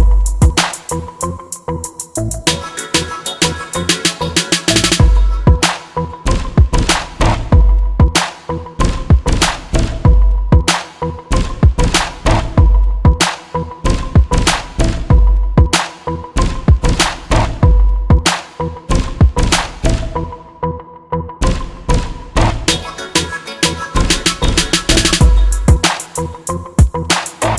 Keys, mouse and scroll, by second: 6.1-7.5 right drag, 6.1 g, 14.4-17.2 drag, 24.5-26.9 drag.